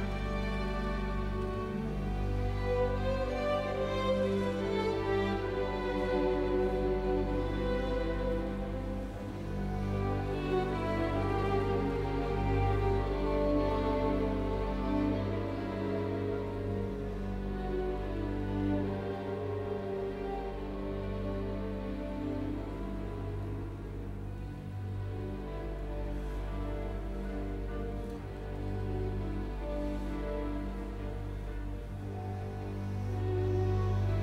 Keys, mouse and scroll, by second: 10.4-11.6 typing, 11.8 Return, 14.4 middle click, 25.1 t, 25.2 space, 25.7 middle click.